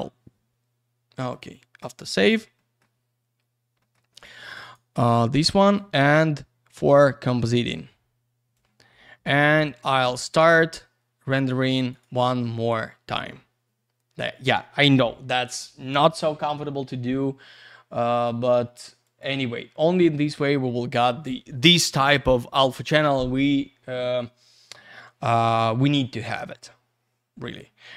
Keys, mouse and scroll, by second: 1.4 click, 2.1-2.6 scroll up 1, 2.6 middle click, 2.9-3.8 scroll down 1, 3.8 middle click, 3.9 middle click, 4.1 scroll up 1, 4.4 click, 4.5 click, 4.6 click, 4.7 click, 5.6 click, 5.7 click, 7.4 click, 7.6 click, 8.5 click, 10.1 scroll down 1, 11.9 click, 12.0 click, 18.1 click, 18.2 click, 19.0 click, 19.2 click, 27.9 scroll up 1.